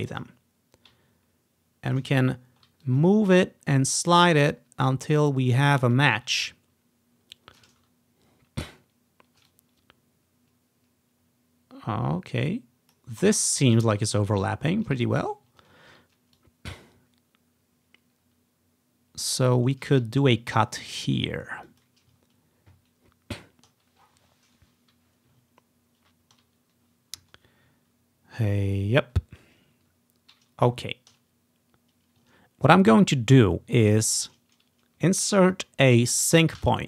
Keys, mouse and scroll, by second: 0.3-2.1 drag, 2.3-3.0 scroll up 1, 3.0-5.8 ctrl+drag, 6.0-6.4 scroll up 1, 6.1-8.8 ctrl+drag, 7.9-8.2 scroll down 1, 8.4 scroll up 1, 8.8 scroll down 2, 9.2 scroll up 4, 9.6-13.1 drag, 14.0 ctrl+scroll up 2, 14.5 ctrl+scroll down 2, 15.8 scroll up 2, 16.5-19.4 drag, 19.6-20.5 scroll up 2, 20.5 scroll down 2, 21.8 click, 22.3-22.9 scroll down 2, 22.9 scroll up 2, 25.8-26.5 ctrl+scroll down 1, 26.5-27.2 scroll down 1, 30.8-31.3 scroll up 1, 31.4-32.3 scroll down 1, 32.5 scroll up 1, 34.1 scroll up 2, 36.7 v.